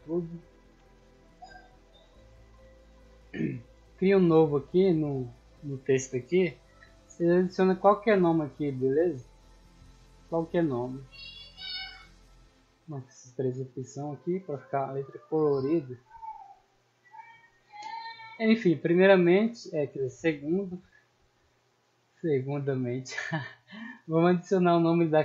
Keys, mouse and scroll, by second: 0.5 ctrl+c, 1.8 click, 3.7 click, 6.2 scroll down 2, 6.6 scroll up 2, 7.6 middle click, 8.5 click, 10.3 click, 10.9 click, 11.4 ctrl+v, 12.7 click, 13.1 click, 13.5 click, 14.3-17.5 middle drag, 18.7 middle click, 18.9-19.5 scroll up 4, 19.8-20.2 shift+middle drag, 20.3 scroll down 2, 20.8 middle click, 21.4 n, 22.0-23.3 scroll down 4.